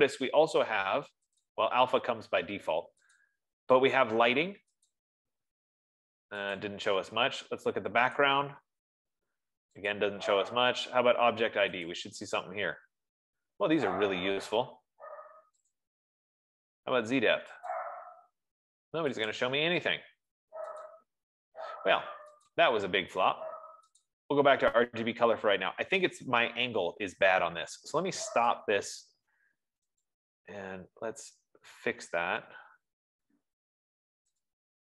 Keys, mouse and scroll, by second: 1.9 click, 3.6 click, 5.3 click, 7.1 click, 8.7 click, 10.2 click, 12.3 click, 16.3 click, 18.2 click, 19.7 click, 21.2 click, 22.9 click, 24.5 click, 29.0 click, 30.6 click.